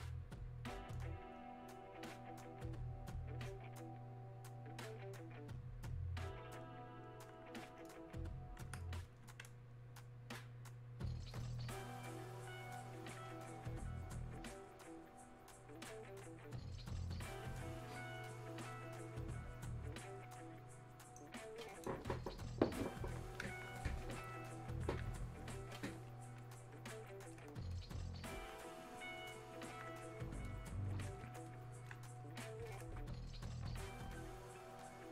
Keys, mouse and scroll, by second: 24.5 alt+click, 26.2-28.3 alt+drag, 28.3-30.4 alt+drag, 30.4 click.